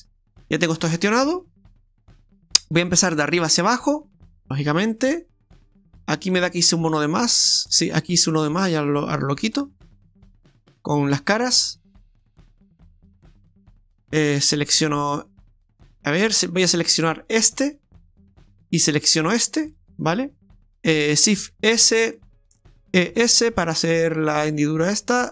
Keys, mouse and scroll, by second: 4.7 right click, 6.3 click, 7.3 right click, 7.7 alt+shift+right click, 8.0 right click, 8.6 right click, 9.4 right click, 9.8 alt+shift+right click, 10.0 alt+shift+right click, 10.9 click, 11.2 click, 12.2 right click, 12.9 alt+shift+right click, 13.2 right click, 17.1 right click, 17.5 alt+shift+right click, 17.8 right click, 19.7 right click, 20.2 scroll up 3, 20.4 ctrl+z, 20.4 click, 20.4 r, 20.5 middle click, 21.4 shift+s, 23.1 e.